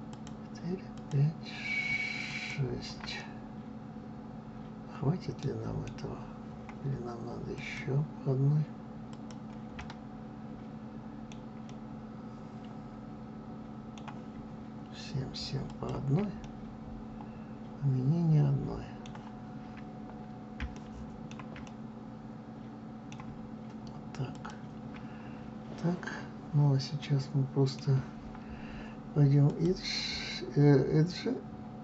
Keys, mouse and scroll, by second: 0.0 shift+click, 0.8 shift+click, 2.1 shift+click, 3.1-7.5 middle drag, 7.5 shift+click, 9.0 shift+click, 9.7-15.6 middle drag, 15.6 shift+click, 16.3-24.2 middle drag, 24.2 shift+click, 25.2-25.6 scroll down 2, 26.1 scroll up 1, 26.9-28.1 middle drag, 28.1-29.4 scroll up 1, 29.4-31.8 drag.